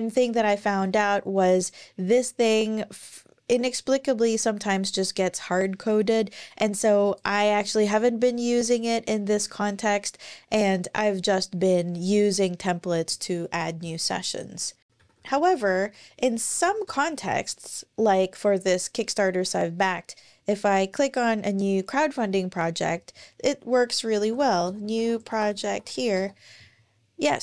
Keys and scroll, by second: 0.1-2.1 scroll down 1, 14.9 super+o, 16.3 Down, 16.3 typing, 16.4 Down, 16.7 Return, 23.9-26.4 typing.